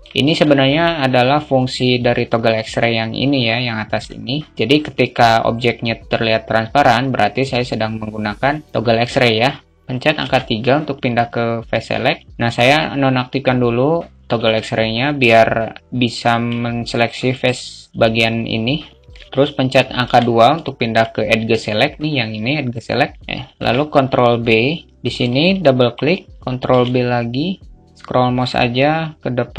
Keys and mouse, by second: 3.3 click, 3.9 click, 19.9 2, 20.0 alt+middle click, 24.7-25.9 alt+middle drag, 26.2 ctrl+b.